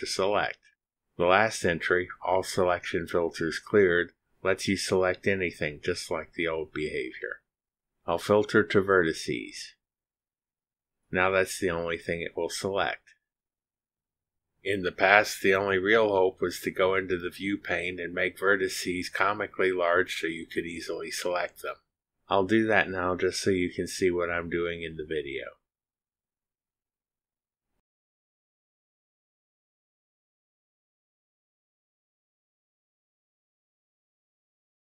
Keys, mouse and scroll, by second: 9.6 click, 18.4 click, 23.8 click, 24.5 scroll down 1, 25.1 scroll down 1, 26.8 click, 28.6-29.6 typing, 30.2 click, 30.4-33.1 scroll up 1, 33.1 click, 34.1 click.